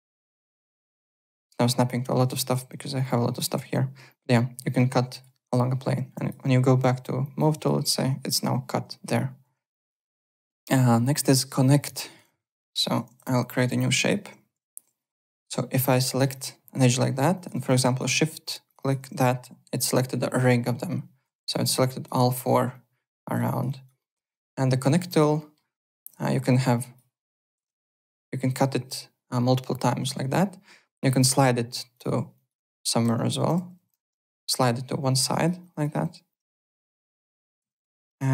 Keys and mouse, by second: 1.1 v, 1.3 alt+click, 2.0 alt+middle click, 2.1 alt+right click, 2.3 click, 2.7 v, 2.9 click, 3.0 click, 3.6 ctrl+z, 4.1 click, 6.1 click, 6.8 w, 7.2 alt+click, 7.5 alt+right click, 7.8 alt+middle click, 9.4 alt+Tab, 9.8 alt+click, 11.5 click, 11.8 alt+click, 12.0-13.2 typing, 12.1 alt+right click, 12.5 click, 12.7 alt+middle click, 13.0 ctrl+d, 13.7 click, 15.0-15.9 typing, 15.1 alt+middle click, 15.7 click, 16.1 alt+middle click, 16.3 alt+click, 17.3 alt+click, 17.5 alt+right click, 18.6 shift+click, 20.6 alt+click, 21.2 z, 21.5 alt+click, 22.7 alt+click, 23.5 alt+right click, 23.6 alt+click, 24.0 alt+middle click, 24.2 alt+right click, 24.8 click, 25.3 middle click, 26.7 click, 27.5 KP_1, 27.5 KP_0, 27.6 Return, 27.6 KP_Enter, 31.2 click, 31.9 click, 32.6-33.8 typing, 33.9 KP_Enter, 33.9 Return, 35.2 click, 35.9-38.3 typing, 36.8 Delete, 37.8 KP_Enter, 37.9 Return.